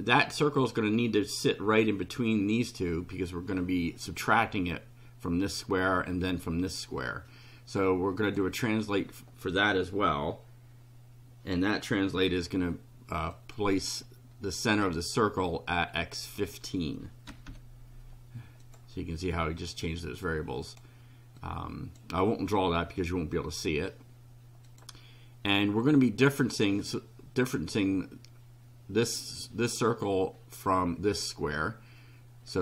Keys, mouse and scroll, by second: 8.2 click, 13.3-15.0 drag, 16.1 click, 17.0-17.9 typing, 18.6 click, 20.2 click, 21.4 click, 24.6 click, 32.5 click.